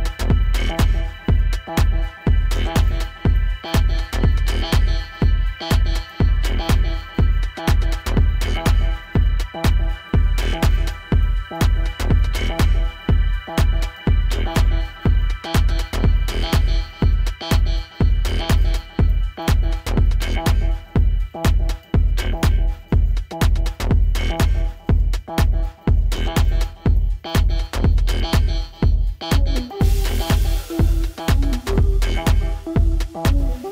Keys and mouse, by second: 0.0 F4, 0.0 click, 1.2 click, 2.0 click, 3.1 click, 4.1-6.2 alt+drag, 7.0 alt+click, 8.7-14.8 alt+drag, 15.0-16.4 alt+middle drag, 22.0 alt+click, 26.1 click, 27.0 alt+F1, 27.1-27.4 drag, 27.9-28.7 drag, 30.2 alt+click, 32.3-33.7 drag.